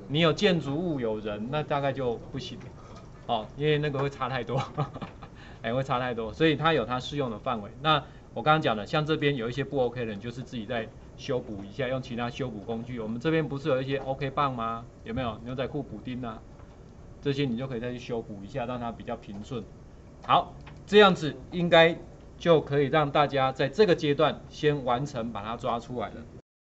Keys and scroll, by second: 22.5 ctrl+d.